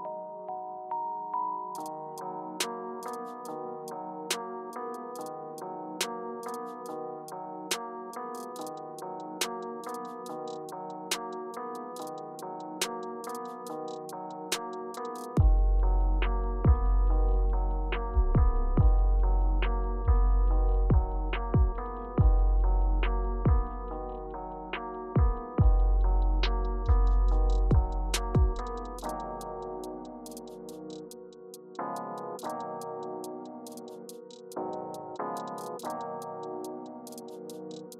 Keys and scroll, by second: 2.6-6.5 typing, 7.6 shift+Page_Up, 8.0 shift+Page_Up, 12.0 super+g, 14.4 shift+Up, 15.8 shift+Up, 16.4 Return, 26.6-27.8 typing, 29.6 typing, 29.9 shift+Page_Up, 33.3 Page_Up, 34.2 Up, 34.3 Page_Up, 34.6 Return, 36.5 Down, 36.7 Page_Down, 36.8 Down, 36.9 Down, 37.1 Page_Down, 37.2 Page_Down, 37.4 Page_Down, 37.6 Page_Down.